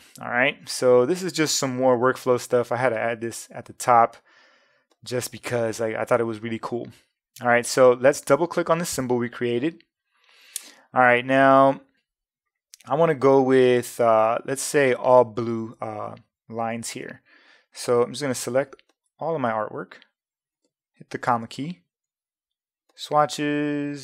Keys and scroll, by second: 18.3 v, 21.3 ,.